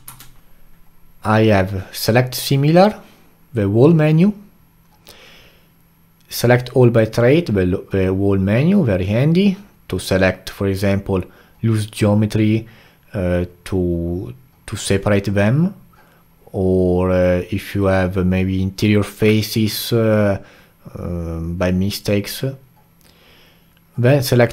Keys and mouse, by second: 0.0 q.